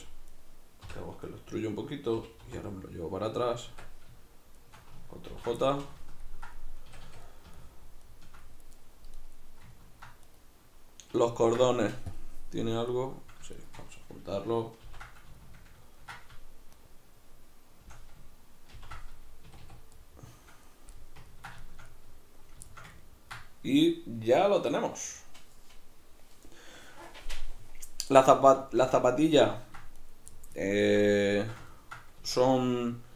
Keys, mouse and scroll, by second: 0.3 right click, 0.9 l, 3.6 click, 3.7 Tab, 4.6 shift+right click, 5.4 ctrl+j, 5.6-9.2 middle drag, 6.9 a, 9.2 right click, 9.8 ctrl+middle click, 10.3 right click, 11.4 ctrl+middle click, 12.2 click, 12.9 right click, 13.5 shift+right click, 14.9 ctrl+j, 15.4-16.7 ctrl+middle drag, 16.7 shift+right click, 18.9 ctrl+j, 19.5 a, 19.9-30.0 middle drag, 30.0 right click, 30.4-33.1 ctrl+middle drag, 32.2 Tab.